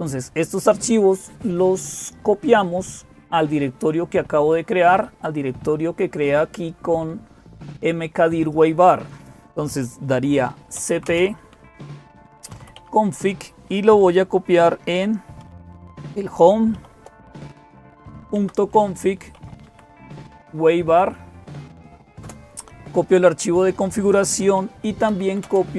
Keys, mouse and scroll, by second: 0.0-25.7 typing, 6.4-10.6 drag.